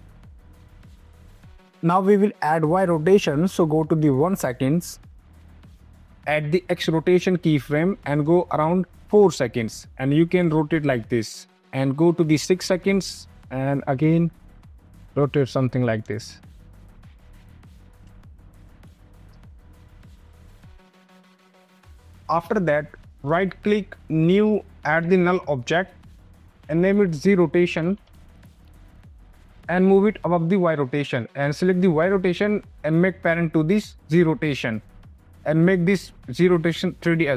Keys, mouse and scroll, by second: 0.3 space, 1.5 click, 4.6 click, 10.2 click, 11.5 click, 12.3 click, 17.4 click, 17.9 click, 18.7 space, 19.1 click, 19.1 space, 22.2 click, 23.5 right click, 24.2 click, 25.2 click, 25.9 click, 26.3 Return, 26.5 BackSpace, 27.6-29.2 typing, 29.4 click, 30.8 click.